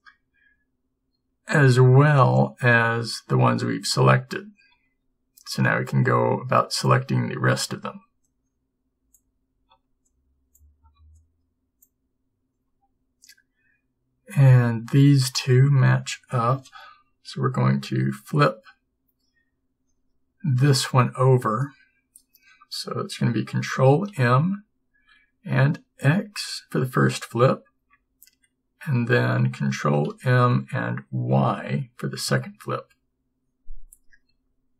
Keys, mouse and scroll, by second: 24.2 ctrl+m, 30.2 ctrl+m, 34.4 g.